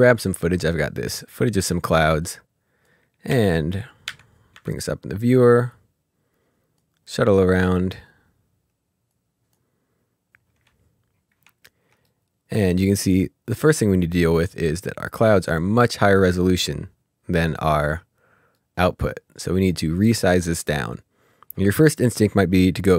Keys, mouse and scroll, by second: 3.3-4.5 typing, 5.7 click, 7.5 click, 9.1 click, 10.7-11.4 scroll down 3, 12.0 middle click, 17.7 middle click, 20.1 click.